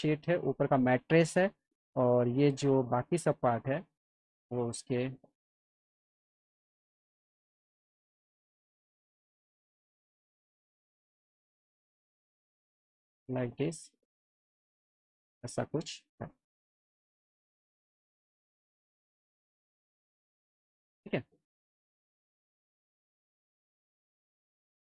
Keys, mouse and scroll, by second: 0.2 click, 0.8 click, 1.8 click, 2.4 ctrl+click, 3.5 ctrl+click, 5.9 click, 7.0 click, 8.9 click, 10.5 click, 11.4 click, 12.3 click, 13.0 click, 15.4 F3, 15.9 click, 16.5 alt+middle click, 17.2 click, 17.8 ctrl+click, 18.9 click, 19.6 click, 20.0 click, 20.3-21.9 alt+middle drag.